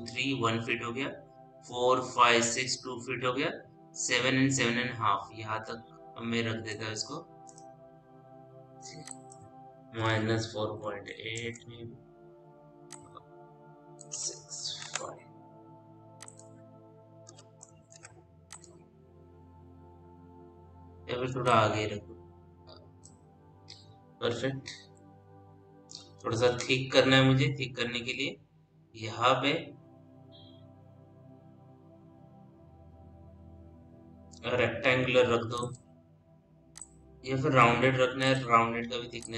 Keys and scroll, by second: 10.4 -, 10.5 KP_4, 10.8 KP_5, 11.0 KP_8, 11.2 Return, 14.7 Return, 17.0 BackSpace, 17.7 Return, 24.6 p, 36.9 scroll down 1.